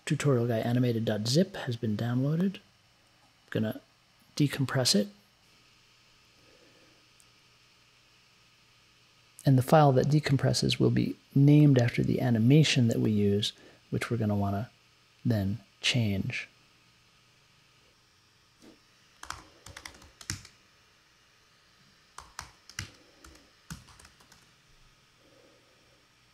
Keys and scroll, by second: 19.1-24.9 typing.